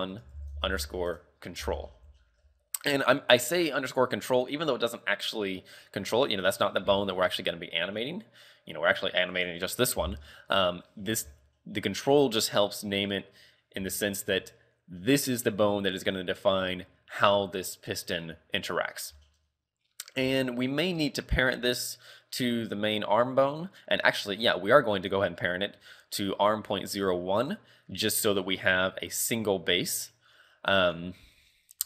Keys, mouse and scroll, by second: 2.2 shift+middle click, 2.6-3.3 scroll up 2, 3.3-4.0 scroll up 1, 9.4 right click, 10.1 right click, 14.0 shift+middle click, 18.9 scroll down 2, 19.3 shift+middle click, 20.0-20.4 scroll down 2, 20.5 shift+middle click, 21.0 scroll up 1, 25.0 click, 31.4-31.8 scroll down 1.